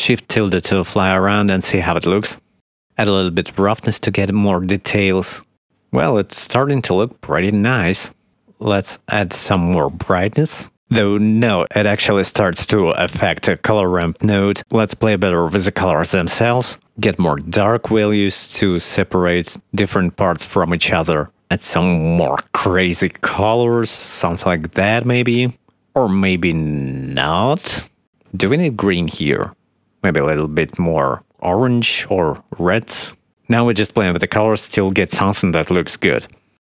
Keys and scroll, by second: 1.5 shift+`, 5.9 shift+`, 34.5 0.